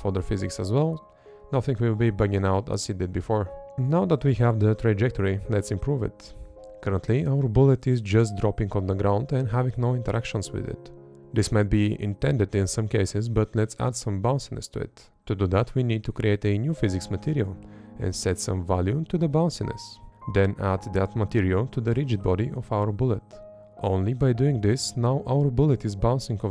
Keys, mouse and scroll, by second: 14.9 Left, 16.6 Up, 18.3 Up, 19.5 Right, 22.0 Up, 22.9 Up, 23.5 Up, 23.9 Up, 25.9 Up, 26.3 Up.